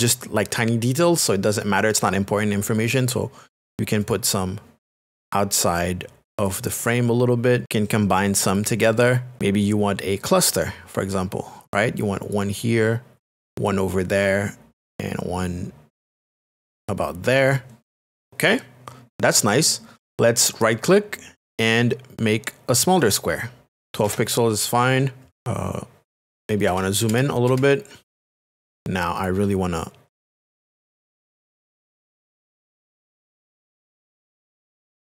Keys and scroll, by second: 24.0 Return, 26.7 ctrl+KP_Add, 28.3 KP_Add, 34.9 space.